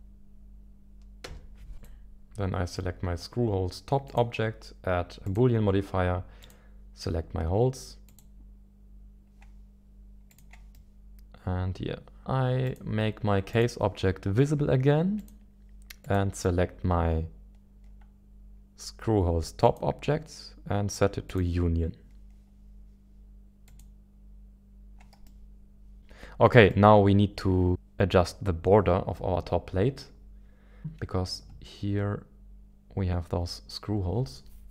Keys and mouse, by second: 5.3-8.8 drag, 10.7-12.2 middle drag, 12.6 click, 13.5 click, 16.0-19.9 drag, 23.7 click, 26.2 middle click, 26.7-28.2 middle drag.